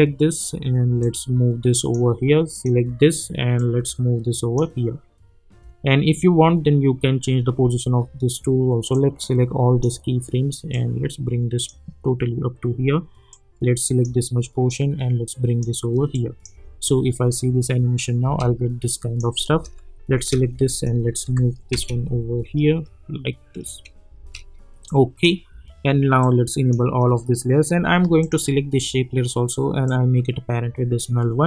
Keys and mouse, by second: 8.9-16.1 drag, 16.5 space, 18.8 click, 19.5 space, 20.7 click, 21.2 [, 21.7 space, 24.1 space, 24.8-28.2 drag, 29.8-31.4 drag.